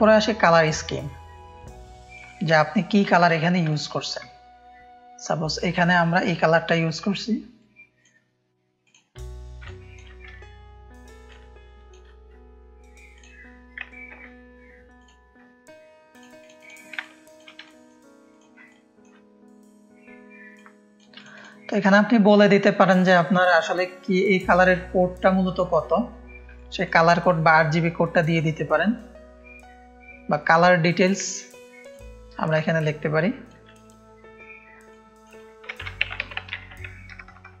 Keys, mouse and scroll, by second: 1.5 space, 1.6 click, 3.6 ctrl+space, 3.8 ctrl+click, 7.6 click, 8.8-9.9 drag, 9.6 ctrl+space, 11.3 alt+shift+click, 13.1 click, 14.1 [, 16.1-17.3 drag, 17.0 ctrl+space, 17.6 click, 17.6 space, 18.6 ctrl+space, 18.6 ctrl+click, 20.5 shift+click, 21.1 click, 26.5 click, 26.5 space, 28.8-30.8 drag, 30.8 scroll up 1, 31.8-33.4 drag, 33.6 click, 34.9 click, 35.7-37.6 typing.